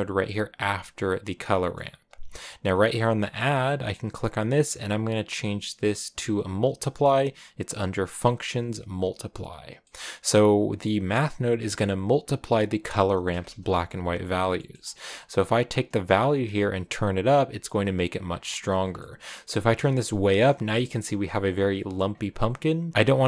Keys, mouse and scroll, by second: 1.4 click, 2.1-8.8 drag, 9.7 middle click, 10.3-18.6 drag, 18.6 scroll down 4, 18.8-19.9 middle drag, 19.9 shift+click, 20.5 scroll down 1, 20.6-21.9 middle drag, 21.9-22.5 scroll up 3, 22.9 m.